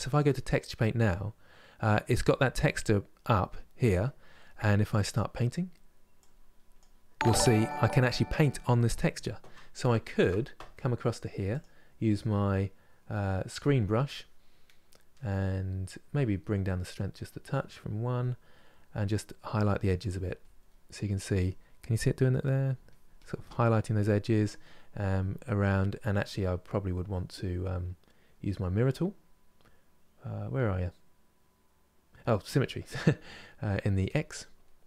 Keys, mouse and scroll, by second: 5.9-9.6 drag, 9.6 ctrl+z, 13.2-18.2 drag, 18.2 middle click, 19.1-20.4 drag, 20.4 middle click, 20.8-22.1 drag, 22.1 middle click, 22.6-23.9 drag, 23.9-33.8 middle drag, 33.8 click, 34.3 middle click.